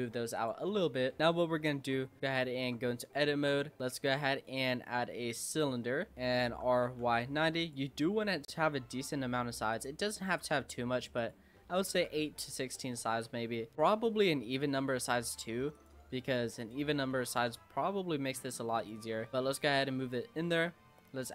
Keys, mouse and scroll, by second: 0.0 Tab, 0.4 click, 0.7-1.2 middle drag, 1.2-1.5 scroll up 3, 1.5-2.2 middle drag, 2.2 click, 2.6 Tab, 3.3 shift+a, 5.8 scroll down 3, 6.1 middle click, 6.5 r, 8.5 click, 9.7 click, 10.2 scroll up 2, 10.4 s, 11.6-13.2 shift+middle drag, 13.2 s, 16.6 click, 17.1 shift+middle click, 17.7 g, 19.0 s, 19.5-21.3 middle drag.